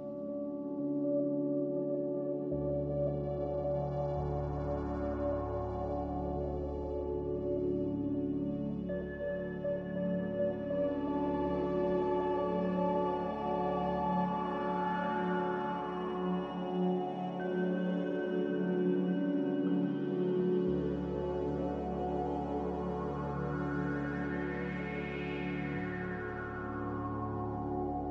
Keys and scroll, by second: 6.5 Return, 13.8 Return, 24.6-25.4 typing.